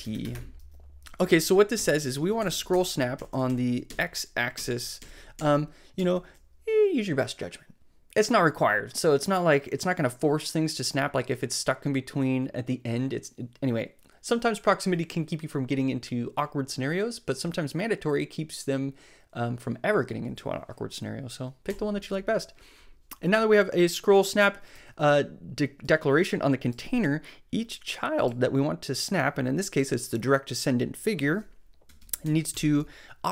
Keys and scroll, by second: 0.0-0.7 typing, 1.7 super+Left, 2.5 alt+shift+Right, 3.3 Right, 5.0 shift+Right, 6.0 shift+super+Left, 6.5 shift+Left, 21.7 Right, 24.7 super+s, 31.8 Return, 32.2 Up, 32.5 Tab.